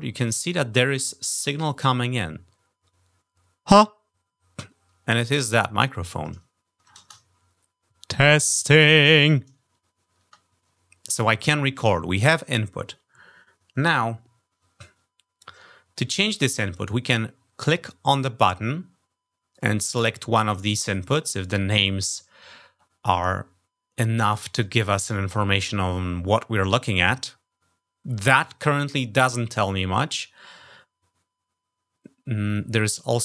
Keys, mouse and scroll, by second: 5.8 click, 6.8 shift+space, 17.4 click.